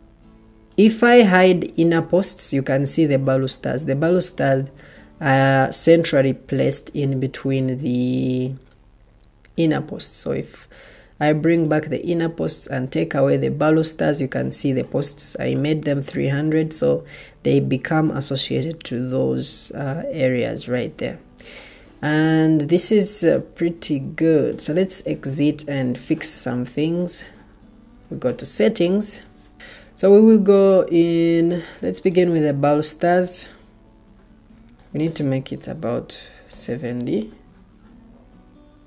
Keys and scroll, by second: 28.5 ctrl+t, 36.1-36.9 typing.